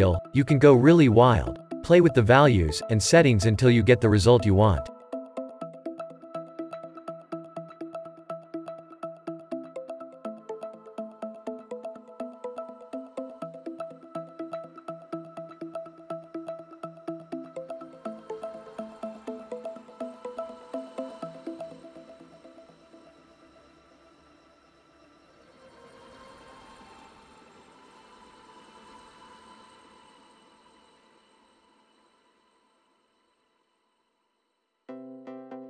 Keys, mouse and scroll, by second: 2.0-7.8 drag, 12.1-29.6 drag.